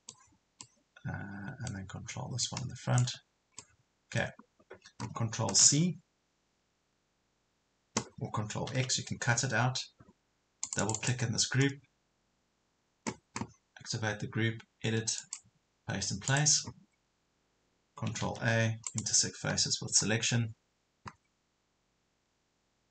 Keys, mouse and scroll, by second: 2.4 ctrl+click, 3.6-4.8 middle drag, 5.6 ctrl+c, 8.7 ctrl+x, 10.7-18.2 drag, 18.3 ctrl+a, 18.9 right click.